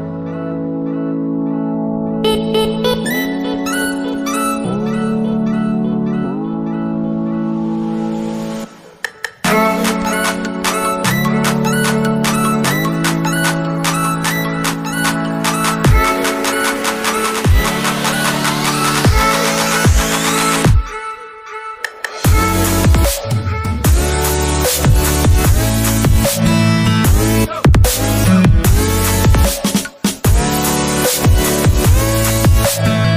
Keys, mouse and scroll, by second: 0.3 alt+Tab, 7.1 double click, 8.2 typing, 17.1 alt+Tab, 21.4 alt+Tab, 28.8 middle click, 30.9 middle click.